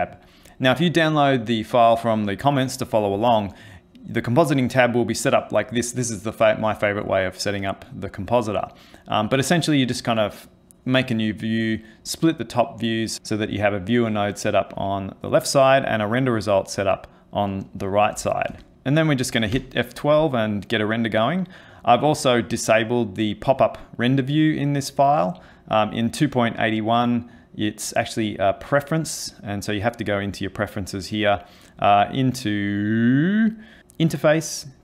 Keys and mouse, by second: 18.7 click, 19.6 F12, 22.4 click, 26.1 click.